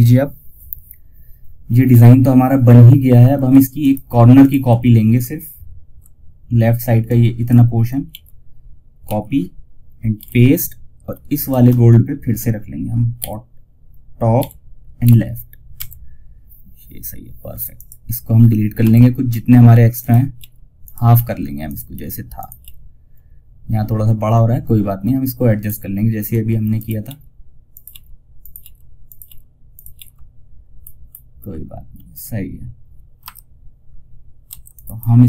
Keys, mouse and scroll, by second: 2.8 ctrl+Num_Lock, 2.8 scroll down 1, 3.1 ctrl+click, 6.3 click, 7.4 ctrl+z, 8.3 ctrl+c, 9.5 ctrl+v, 10.7 shift+click, 12.5 b, 13.7-14.8 typing, 17.0 ctrl+click, 18.5 scroll up 1, 19.2 ctrl+click, 19.7 ctrl+r, 20.1 ctrl+click, 20.4 ctrl+r, 20.9 ctrl+click, 21.2 ctrl+r, 21.7 ctrl+click, 21.9 ctrl+r, 23.4 scroll down 1, 25.1 scroll up 1, 26.1 ctrl+click, 26.3 ctrl+r, 27.0 ctrl+click, 27.2 ctrl+r, 27.7 ctrl+click, 27.9 ctrl+r, 28.3 ctrl+click, 28.6 ctrl+r, 29.0 ctrl+click, 29.2 ctrl+r, 30.0 scroll up 1, 31.4-31.7 scroll down 1, 32.5 F4, 33.8 F2.